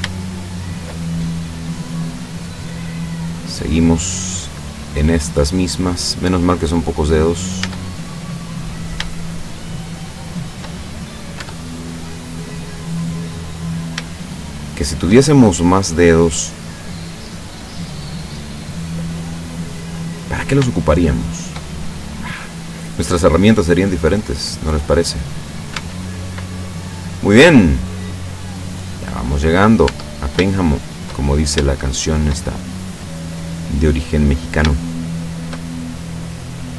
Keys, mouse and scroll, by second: 0.1 shift+right click, 0.7 shift+right click, 4.6-6.2 drag, 6.7-7.7 middle drag, 7.7 Tab, 8.4-9.0 middle drag, 9.3-10.0 shift+middle drag, 10.1-10.7 shift+middle drag, 11.2 shift+right click, 11.5 Tab, 12.0 scroll up 1, 12.1-13.2 middle drag, 13.6 right click, 14.2 shift+right click, 14.9 shift+right click, 15.5 shift+middle click, 16.6-18.7 drag, 18.8 middle click, 20.3 right click, 21.0 shift+right click, 21.8-22.8 shift+middle drag, 23.3-24.6 drag, 25.3 scroll down 1, 25.8 Tab, 26.6-27.4 middle drag, 27.4-28.2 scroll down 2, 28.2-29.0 middle drag, 29.5 right click, 30.0 Tab, 30.6 shift+scroll up 1, 30.6-31.2 shift+middle drag, 31.3-31.8 shift+scroll up 1, 31.8-32.5 shift+middle drag, 32.7 shift+middle click, 33.1 scroll up 1, 34.4 right click, 34.9 shift+right click, 35.4 shift+right click, 35.8-36.7 shift+middle drag.